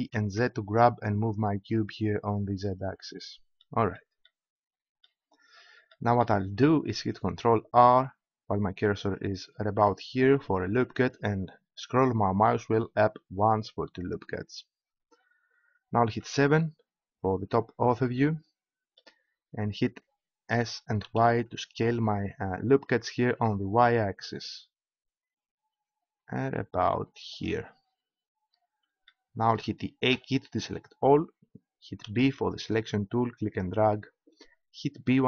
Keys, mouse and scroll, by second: 2.9-5.4 drag, 7.9 ctrl+r, 13.4-16.0 drag, 16.2 KP_7, 20.5 s, 27.5-29.9 drag, 29.9 middle click, 30.1 a, 32.0 b, 35.0 b.